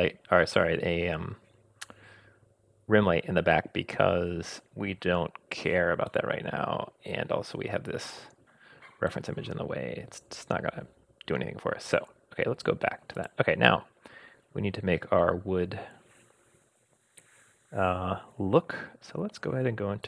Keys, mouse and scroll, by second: 6.1-7.7 middle drag, 9.1-12.0 middle drag, 13.1 click, 14.2-14.6 scroll up 2, 14.8 scroll down 1.